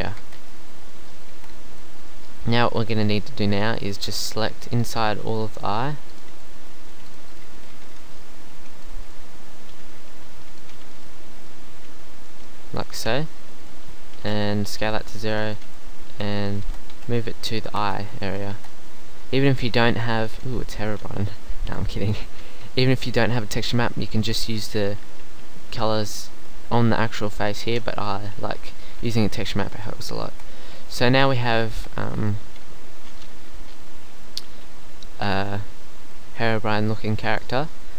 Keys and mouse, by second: 0.2 Tab, 1.4 Tab, 3.6-5.0 drag, 7.4 middle click, 8.6 b, 10.1 b, 11.8 b, 14.0 s, 15.1 g, 16.1 g, 16.6 shift+Tab, 16.9 g, 17.8 shift+Tab, 18.5 Tab, 30.2 Tab, 31.7 Tab.